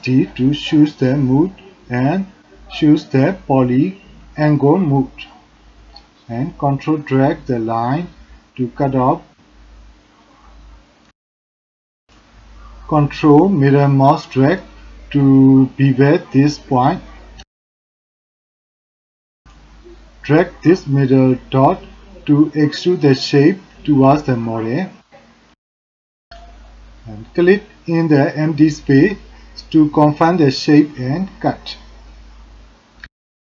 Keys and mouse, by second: 4.8-6.4 drag, 17.9 click, 21.3 click, 24.1 click, 24.3 shift+click, 24.4 middle click, 24.7 alt+middle click, 25.1 middle click, 25.5 shift+middle click, 25.6 middle click.